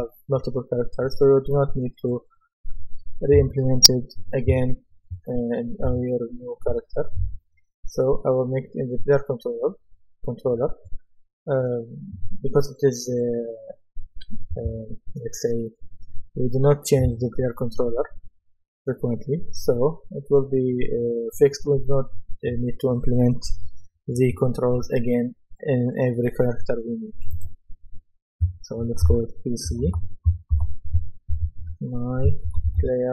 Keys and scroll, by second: 29.4-33.1 typing.